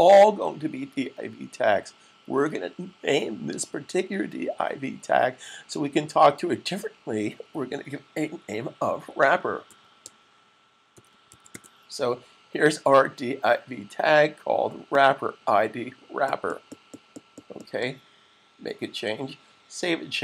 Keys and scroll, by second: 8.9-11.9 typing.